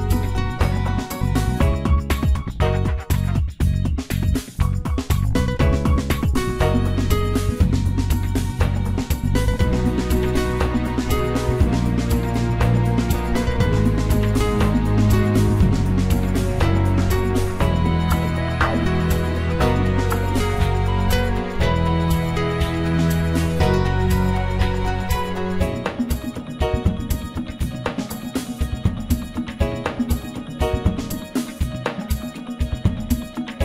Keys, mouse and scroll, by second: 0.1-0.9 middle drag, 0.9-1.3 scroll up 1, 1.3-2.5 middle drag, 2.5-3.8 drag, 3.8-4.8 middle drag, 4.8-5.8 right drag, 5.8-7.3 middle drag, 7.3 click, 7.8-8.8 scroll down 1, 8.8 KP_3, 9.6-10.4 scroll up 2, 11.0 shift+d, 15.1 shift+r, 16.4 shift+click, 17.6 shift+d, 21.2 g, 26.9 click, 28.2 shift+d, 32.1 g.